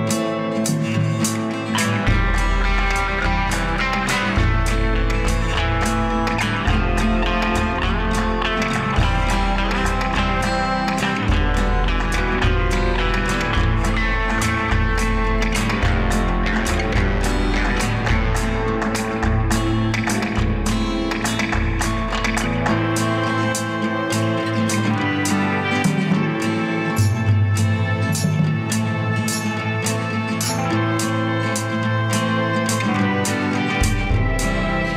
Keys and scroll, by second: 14.0 Delete, 33.3 Delete.